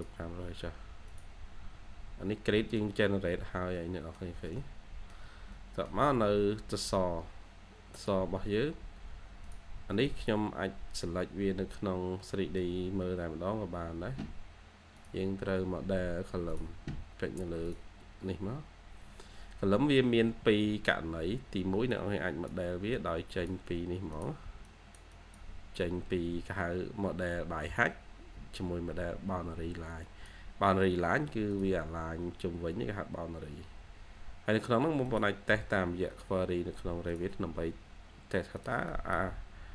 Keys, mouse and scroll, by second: 1.5 scroll up 1, 2.5 middle click, 2.7-3.5 scroll down 1, 3.5 scroll up 1, 3.7 middle click, 5.1 shift+scroll, 5.1 shift+scroll up 1, 5.3 shift+scroll, 5.4 middle click, 5.8 scroll down 1, 8.3 scroll up 1, 9.6 scroll down 1, 9.8 middle click, 11.8-12.1 scroll up 1, 12.1 middle click, 12.7 scroll down 1, 12.8 scroll up 1, 16.9-17.9 scroll down 1, 20.6 ctrl+q, 25.3 double click, 30.8-31.6 scroll up 1, 31.9 scroll up 1, 38.8 double click.